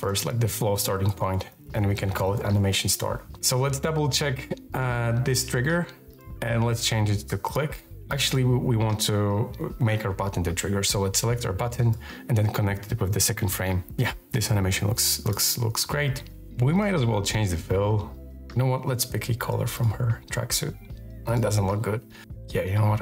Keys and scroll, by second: 0.8-2.7 typing.